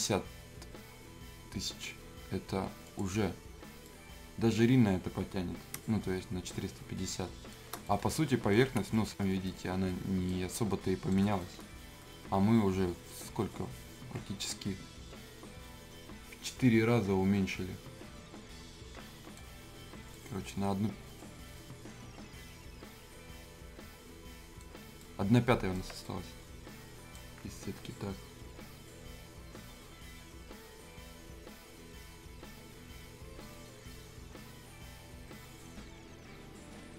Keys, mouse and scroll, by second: 2.8 click, 3.8-7.8 right drag, 7.8-29.6 right drag.